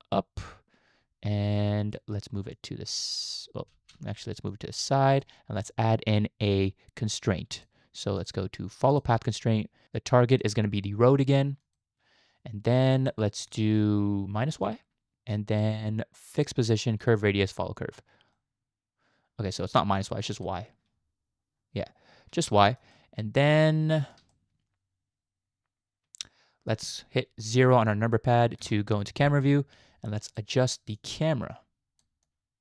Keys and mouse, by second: 2.6 click, 3.8 ctrl+z, 4.5 click, 8.2 click, 10.3 click, 13.1-13.5 shift+middle drag, 14.5 click, 16.4 click, 17.0 click, 17.5 click, 18.3-19.5 middle drag, 20.3 click, 22.5-22.8 shift+middle drag, 22.9-24.2 middle drag, 24.3-26.7 shift+middle drag, 28.6 KP_0, 30.3 click, 30.9-32.0 drag, 32.3 click.